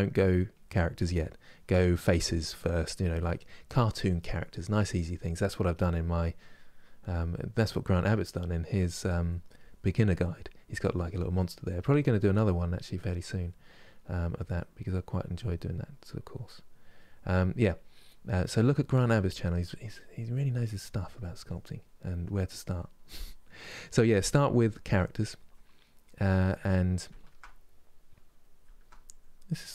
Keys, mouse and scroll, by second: 0.8 middle click, 1.3 click, 2.2 middle click, 2.6 click, 3.4 middle click, 3.8-5.0 drag, 5.0 middle click, 5.4-6.9 drag, 6.9 middle click, 7.4-8.9 drag, 8.9 middle click, 9.3 click, 10.0 middle click, 10.4-11.5 drag, 11.5 middle click, 12.0-13.4 drag, 13.4 middle click, 14.0 click, 14.6 middle click, 15.1 click, 15.7 middle click, 16.2 click, 17.0-18.4 middle drag, 18.4-19.7 drag, 19.7 middle click, 20.1 click, 20.7 middle click, 21.2 click, 21.5 middle click, 21.9 click, 22.5 middle click, 22.9 click, 23.6 middle click, 24.4-25.5 drag, 25.5 middle click, 26.0 click, 26.9-29.7 ctrl+middle drag.